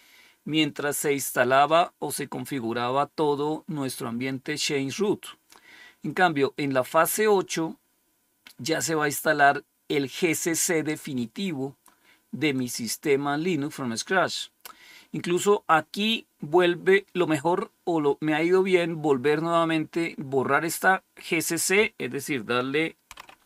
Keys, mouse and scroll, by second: 1.2-3.7 scroll down 2, 5.1-6.4 scroll down 2, 7.0-9.6 scroll down 2, 10.6-11.3 scroll down 2, 12.4 click, 21.5 click, 23.0-23.4 typing.